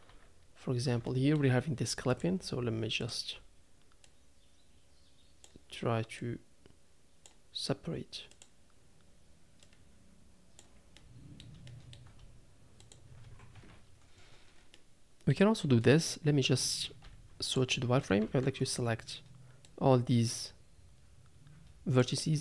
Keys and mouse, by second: 0.1 Tab, 1.0 shift+middle click, 2.2 click, 4.1-5.5 drag, 6.2-7.2 drag, 8.4 click, 9.7 click, 11.0 middle click, 11.7 shift+middle click, 12.9 shift+click, 13.5 KP_Decimal, 14.7 middle click, 17.0 z, 18.0 a, 18.2 a, 18.2 c.